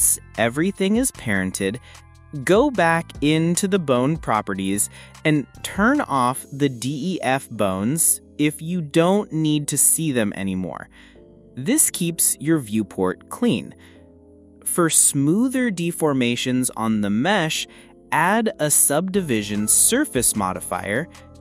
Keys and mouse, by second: 0.1 ctrl+p, 2.8 click, 3.6 click, 14.2 click, 16.9 click, 19.6 click, 20.5 click, 21.0 click.